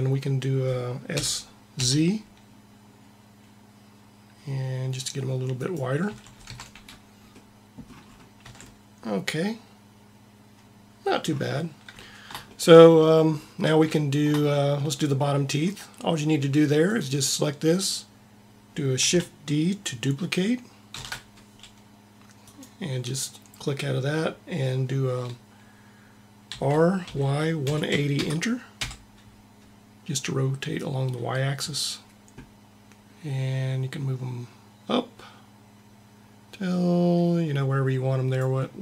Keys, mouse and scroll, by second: 1.0 s, 6.0 a, 6.3 Tab, 8.4 a, 16.8-18.2 drag, 18.2 Tab, 18.2 a, 20.8 shift+d, 26.4 r, 30.6 click.